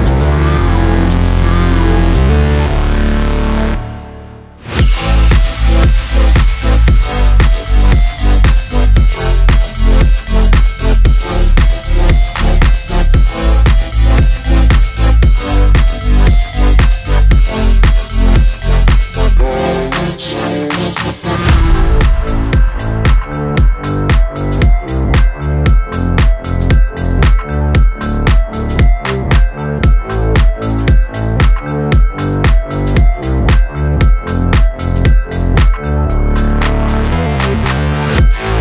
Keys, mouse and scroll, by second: 0.2 3, 0.6 click, 5.0 alt+z, 5.0 alt+x, 5.8 shift+click, 7.7 alt+z, 8.8 s, 9.0 z, 15.2 ctrl+click, 17.5 click, 19.5 a, 21.1 shift+d, 21.7 right click, 22.6 r, 22.9 y, 23.8 9, 24.1 0, 24.9 click, 25.6 Tab, 26.3-27.2 scroll down 7, 27.2-27.5 scroll up 4, 27.5 Tab, 28.7 click, 30.5 alt+shift+z, 31.7 alt+shift+z, 32.2 alt+z, 33.2 shift+click, 34.5 shift+click, 35.5 shift+click, 36.7 s, 37.8 right click, 37.8 scroll up 1, 38.0 alt+s.